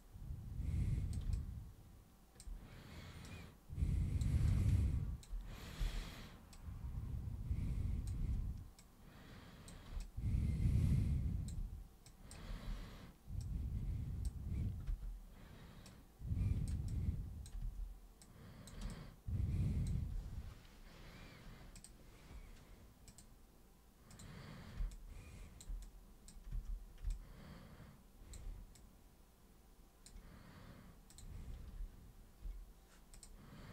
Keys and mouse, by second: 1.3-2.4 alt+super+drag, 3.2 super+click, 4.4-5.2 alt+super+drag, 5.8 super+r, 6.5-8.1 super+drag, 8.1 super+w, 8.8 super+click, 10.0-11.4 alt+super+drag, 12.0 super+drag, 12.4 super+e, 13.4-14.2 super+drag, 14.9 super+r, 15.9-16.7 super+drag, 16.8-17.4 alt+super+drag, 17.6 super+w, 18.2 super+click, 18.9 alt+super+click, 21.7 super+click, 23.0 super+click, 24.1 super+click, 24.9 alt+super+click, 25.8 super+click, 26.5 super+w, 27.1-28.3 alt+super+drag, 28.7-30.0 super+drag, 31.1 super+click, 33.1 super+click.